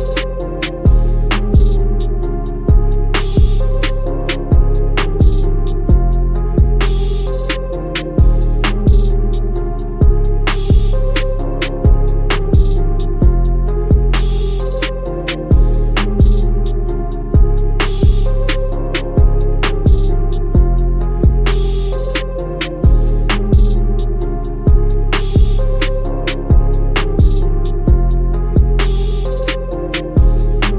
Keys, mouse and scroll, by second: 1.1 click, 3.6-5.8 drag, 8.3 Left, 13.6-15.8 drag, 16.6 Right, 22.1-24.1 drag, 26.5 Left, 30.2 click.